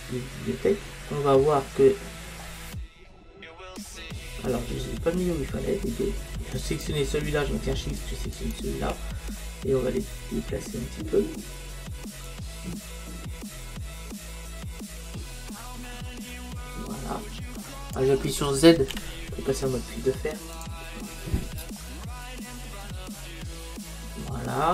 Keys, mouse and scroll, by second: 1.4-6.7 middle drag, 4.6-6.6 scroll down 1, 6.7-14.1 drag, 19.0 z, 21.8-23.8 middle drag.